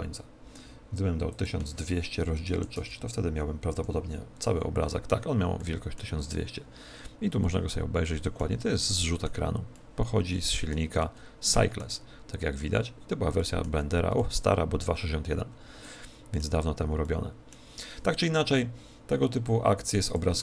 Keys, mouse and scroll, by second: 2.7 click, 4.4 F12.